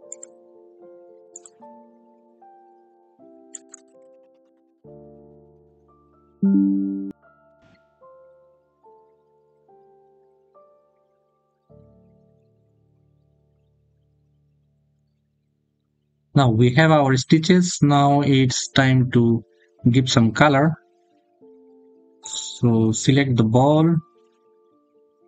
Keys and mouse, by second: 0.8 click, 2.7 click, 10.8 click, 12.2-13.8 drag, 14.8 click, 15.6 click, 17.4 middle click, 22.0 click.